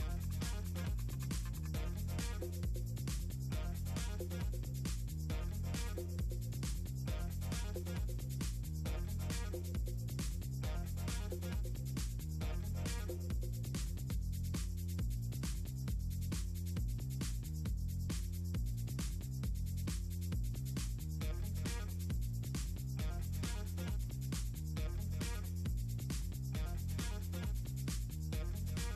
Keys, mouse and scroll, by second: 0.4 right click, 4.9 click, 9.1 click, 10.3 click, 11.6 Return, 12.8 click, 14.8 click, 15.5 click, 17.2 click, 18.5 click, 19.1-20.2 ctrl+drag, 20.4 click, 22.7 click, 23.2 click, 24.1 click, 24.5 shift+click, 25.2 click, 25.4 click, 26.3 click, 27.4 click, 28.4 click, 28.6 click.